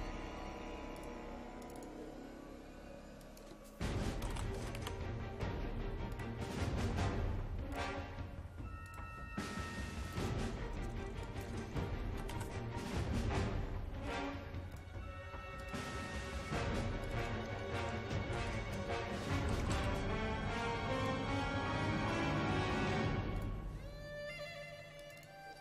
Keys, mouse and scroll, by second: 1.9 click, 3.9-5.9 typing, 6.1-12.3 drag, 12.0-12.8 typing, 14.1 click, 19.2-20.3 typing, 21.0-25.6 drag.